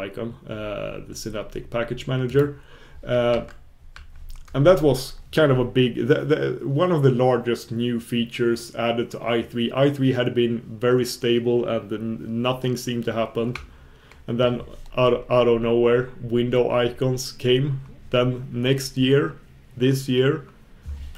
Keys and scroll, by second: 3.4 super+b.